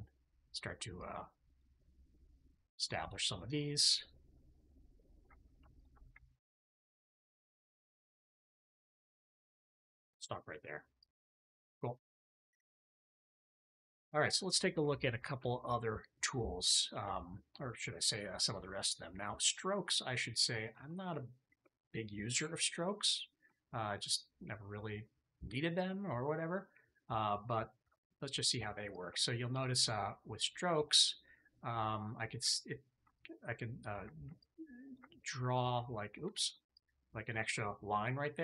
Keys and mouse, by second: 0.9-2.3 ctrl+drag, 5.6 alt+click, 8.8 click, 9.8 a, 10.9 click, 11.4-12.6 drag, 12.9 shift+middle click, 13.2 middle click, 13.7 shift+middle click, 13.9 middle click, 20.5 alt+click, 22.2 KP_3, 23.4 shift+click, 27.7 alt+q, 33.0 ctrl+click, 34.3 ctrl+click, 35.5 click, 36.2 ctrl+z, 36.6 ctrl+click, 37.8-38.4 drag.